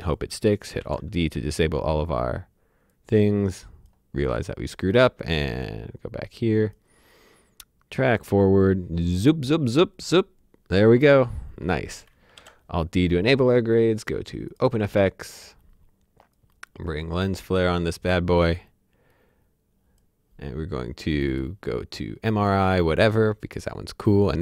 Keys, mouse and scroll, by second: 0.8 d, 2.9 click, 12.2 alt+Num_Lock, 12.3 alt+d, 14.5 click, 16.3 click, 19.1 click, 23.9 click.